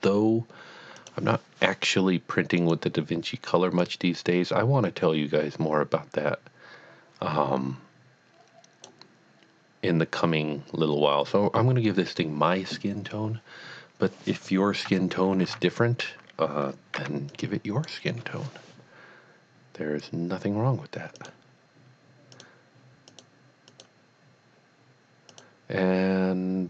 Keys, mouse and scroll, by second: 1.0 click, 2.6 click, 3.8 click, 15.8 a, 17.1 b, 17.3 click, 21.2 click, 21.5 click, 22.3 click, 23.3 click, 23.7 click, 25.3 click.